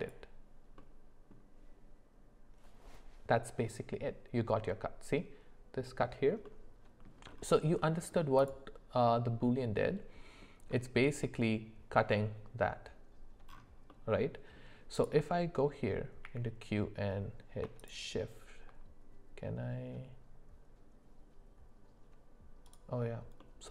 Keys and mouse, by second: 0.8 middle click, 6.4 middle click, 7.8 middle click, 8.4 click, 9.1-10.4 middle drag, 13.9 middle click, 16.2 q, 23.4-23.7 middle drag.